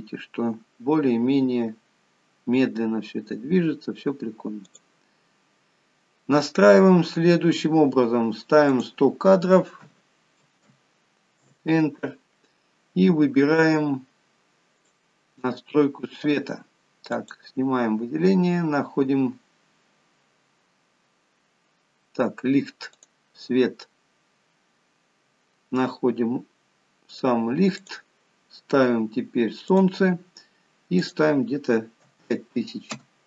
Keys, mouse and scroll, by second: 5.0 click, 5.7-8.1 scroll down 3, 9.1 click, 11.0 0, 16.4 click, 17.7 click, 18.9-19.9 scroll up 8, 20.2-21.3 scroll down 9, 21.3 scroll up 2, 23.4 click, 24.7-25.1 scroll up 1, 25.1-26.2 scroll down 5, 28.2 click, 30.1 click, 31.6 click.